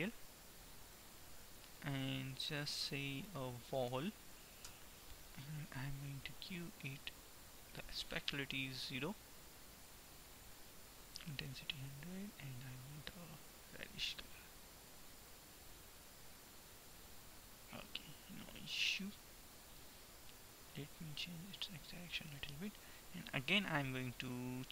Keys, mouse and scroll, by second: 2.9-5.9 middle drag, 3.9 l, 7.1-13.8 drag, 18.1-19.9 middle drag, 20.9-22.8 drag.